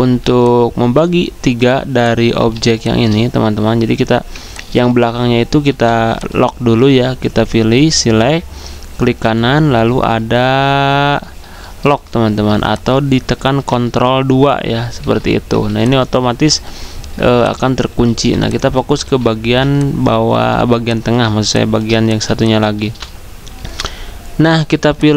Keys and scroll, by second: 0.1 z, 15.0 ctrl+2, 17.2 typing, 19.0 ctrl+z, 19.0-19.4 typing, 22.8 v.